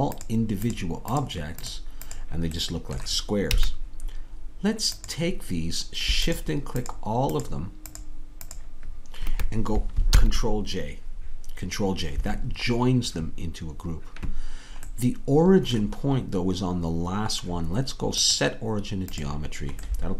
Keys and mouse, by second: 3.6 a, 10.2 ctrl+j, 19.7-20.1 drag.